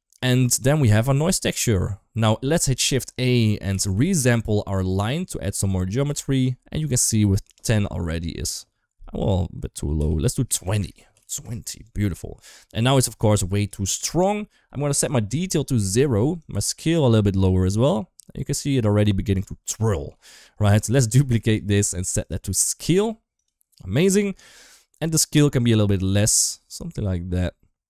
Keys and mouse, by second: 1.5-2.0 shift+middle drag, 2.5 shift+a, 5.3 g, 6.9 shift+middle click, 7.4-11.4 drag, 10.4 BackSpace, 10.6 BackSpace, 12.5 shift+middle click, 13.0-13.5 drag, 13.9 shift+middle click, 14.9 click, 16.2-19.3 drag, 19.7 shift+middle click, 20.5 click, 20.8 shift+middle click, 21.2 shift+d, 22.1-23.4 drag, 24.1 shift+middle click, 24.8-27.8 drag.